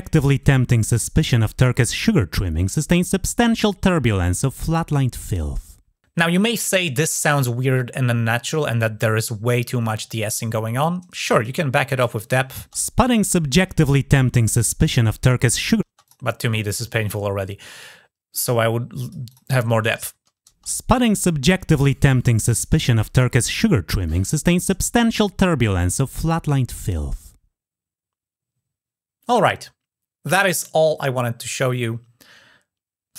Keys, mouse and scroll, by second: 10.3-11.3 drag, 11.7 click, 15.9 click, 18.1 click, 19.1 click.